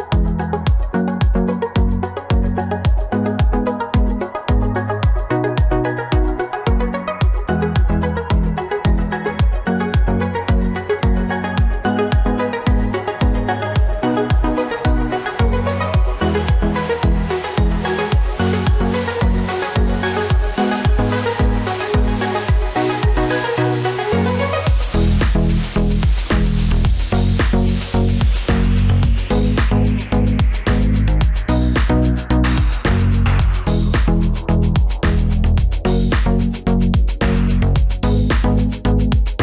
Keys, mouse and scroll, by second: 15.5 ctrl+t, 18.8 right click, 26.2 Delete, 28.3 Delete, 28.5 ctrl+d, 31.7 right click, 39.2 right click.